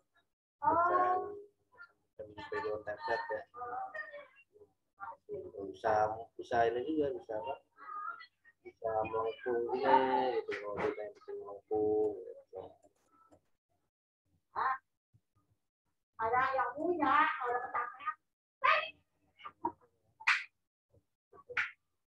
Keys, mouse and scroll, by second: 15.3 ctrl+z, 16.7 click.